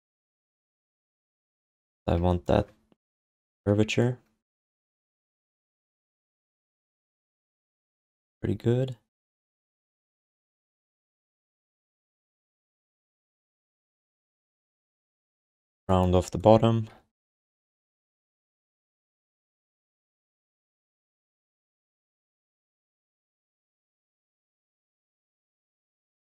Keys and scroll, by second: 0.0-0.3 typing, 1.8 r, 14.1 q, 15.6 w, 17.6-18.5 typing, 20.6 w, 22.0 r, 23.7 w, 25.6 r.